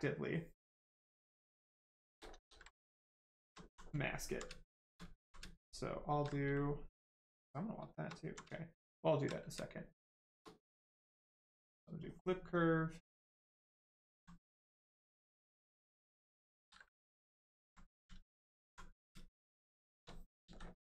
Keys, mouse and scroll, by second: 2.3 ctrl+z, 2.7 right click, 3.5 alt+right click, 5.0 alt+right click, 6.3 shift+right click, 7.8 shift+right click, 8.1 alt+right click, 11.9 click, 15.7 right click, 16.5 ctrl+z, 17.0 right click, 17.1 shift+right click, 17.5 alt+right click, 19.0 ctrl+right click, 20.4 ctrl+click.